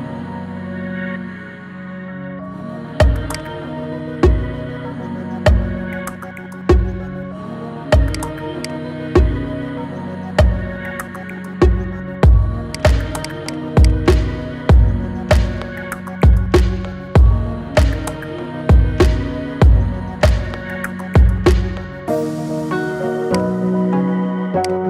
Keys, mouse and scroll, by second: 0.2-1.0 middle drag, 1.0 KP_1, 1.8 shift+middle click, 2.2 scroll up 3, 3.2-4.4 shift+drag, 4.4 scroll down 4, 5.5-6.1 middle drag, 6.1-6.5 scroll down 3, 6.5-8.0 middle drag, 8.0-8.8 drag, 8.8-9.2 scroll up 4, 9.2-11.0 shift+middle drag, 11.0 Tab, 11.7-12.5 scroll up 1, 12.5 click, 13.0 alt+shift+click, 13.2 alt+shift+click, 13.6 alt+shift+click, 14.1-14.5 scroll down 3, 14.5 shift+middle click, 15.3 scroll down 1, 15.9 shift+middle click, 16.3-16.8 scroll up 4, 16.8 shift+middle click, 17.5 ctrl+z, 17.9 ctrl+z, 18.2 ctrl+z, 18.5 ctrl+z, 18.8 ctrl+z, 19.2 ctrl+z, 19.6 ctrl+z, 20.3 ctrl+z, 24.5-24.8 drag.